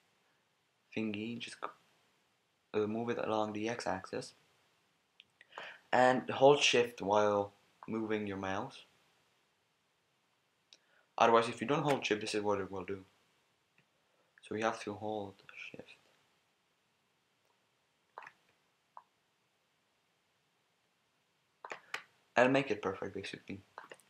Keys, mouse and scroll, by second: 7.8 click, 9.8 middle click, 12.5-14.3 drag, 15.1 middle click, 18.9 click, 22.5 click.